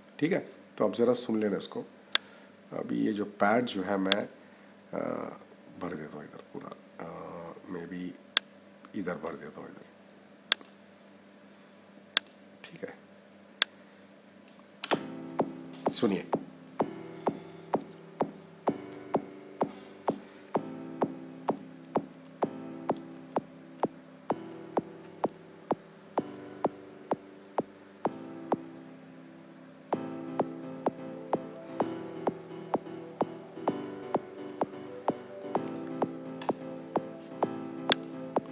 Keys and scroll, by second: 14.6 -.